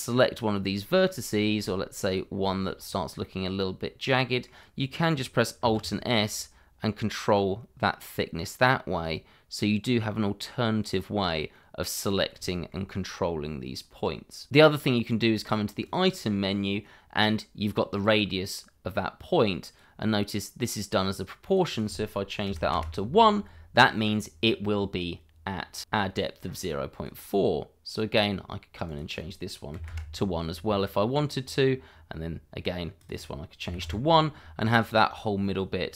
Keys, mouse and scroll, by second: 0.8 shift+middle click, 1.9 click, 2.4 shift+middle click, 2.7 scroll up 1, 3.2 middle click, 5.7 alt+s, 10.8 click, 11.1 scroll down 1, 11.5 middle click, 12.4 middle click, 14.5 click, 15.8 click, 18.0 click, 22.4 1, 22.7 Return, 26.6 click, 29.7 1, 29.9 Return, 30.8-31.2 scroll down 1, 31.2 click, 33.6 1, 33.8 Return.